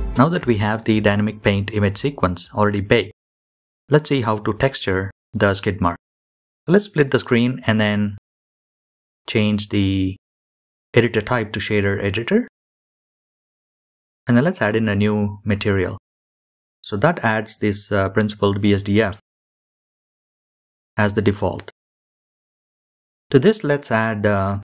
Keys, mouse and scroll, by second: 1.9-9.1 drag, 10.3 n, 14.2-15.3 drag, 16.3-18.0 scroll up 1, 18.0-20.3 drag.